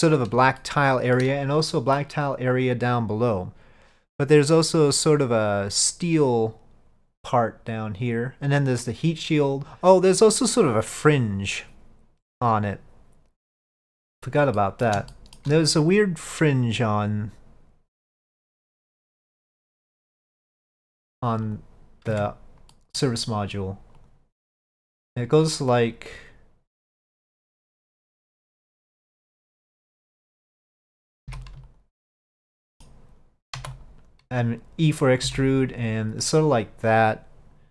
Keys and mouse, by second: 0.7-1.3 shift+middle drag, 1.8 middle drag, 2.4 click, 13.9 middle drag, 14.6 middle drag, 15.2 shift+middle drag, 19.0-20.1 middle drag, 20.8-21.6 drag, 22.2 Tab, 22.8 middle click, 24.1 click, 25.3-27.3 drag, 28.4 click, 28.8 middle click, 30.4 alt+click, 31.7 alt+click, 32.7 middle click, 33.6 e.